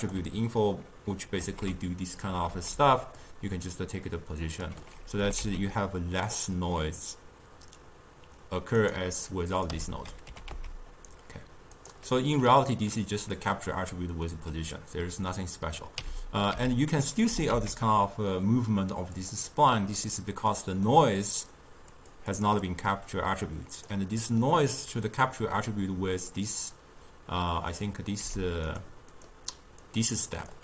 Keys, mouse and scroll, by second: 0.1 click, 1.5 ctrl+h, 2.6 ctrl+h, 3.3-5.4 drag, 5.4 g, 9.7 click, 9.9 m, 10.4 g, 13.5 click, 16.2 m, 16.7 m, 17.4 g, 20.2-22.1 middle drag, 22.1 click, 22.4 click, 22.8-24.2 drag, 24.2-26.3 middle drag, 26.3-28.4 drag, 28.4 g, 29.3 drag, 29.7 click, 30.4 click.